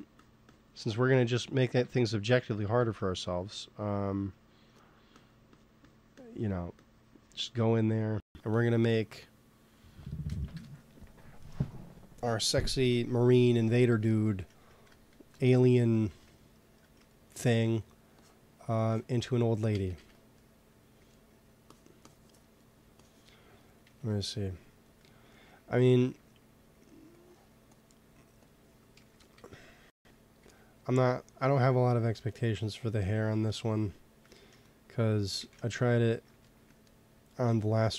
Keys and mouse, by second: 1.0 ctrl+z, 1.7 ctrl+z, 2.7 ctrl+z, 3.3 click, 5.1-10.2 drag, 8.8-10.4 middle drag, 10.4 KP_1, 14.0-15.2 middle drag, 15.2 KP_1, 18.1-19.7 drag, 19.7 ctrl+z, 19.9 ctrl+z, 20.3 click, 21.6-24.5 drag, 23.8 KP_3, 25.6 g, 26.0 t, 27.0 click, 28.6 t, 28.9 f, 29.3 z, 30.3 z, 33.9-35.9 drag, 35.3 ctrl+z.